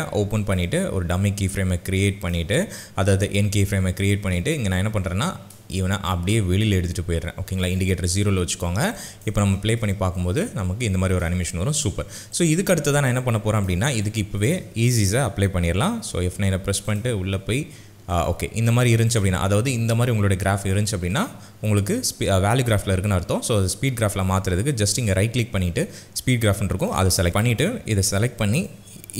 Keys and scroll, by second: 9.4 space, 16.1 F9.